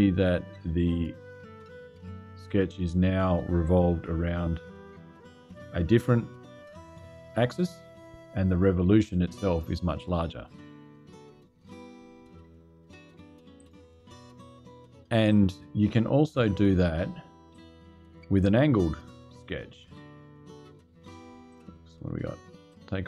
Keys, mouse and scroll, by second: 3.7-4.0 scroll down 2, 13.3 click, 14.8 click, 17.2 click, 19.6 click, 20.9 click, 21.2 click, 22.4 click.